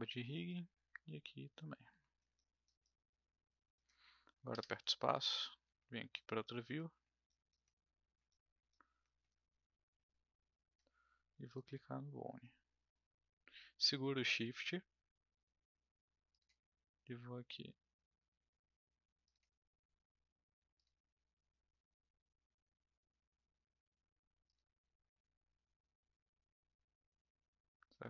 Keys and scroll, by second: 4.5 space.